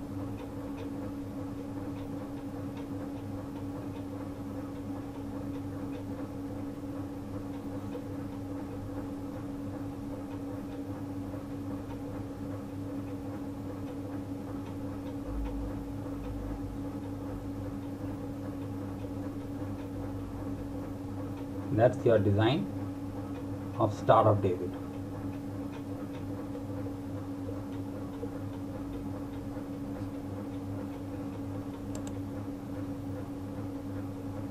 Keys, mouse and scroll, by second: 4.2 click, 9.5 click, 15.1 click, 17.6 click.